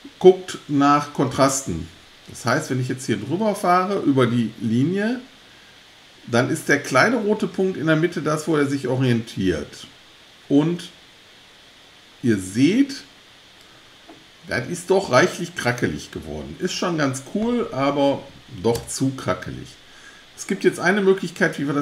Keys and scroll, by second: 18.8 alt+BackSpace.